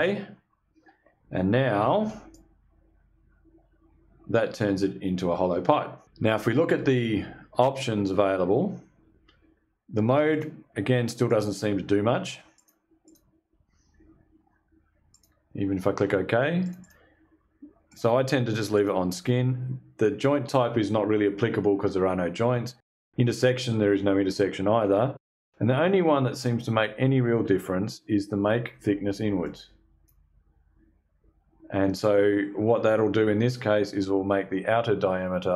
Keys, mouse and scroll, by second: 1.8-6.0 shift+drag, 9.8 click, 10.8 click, 12.0 click, 12.5 click, 14.6 click, 16.1 click, 17.4 click, 18.2 click, 25.6-25.9 scroll up 1, 28.9 click.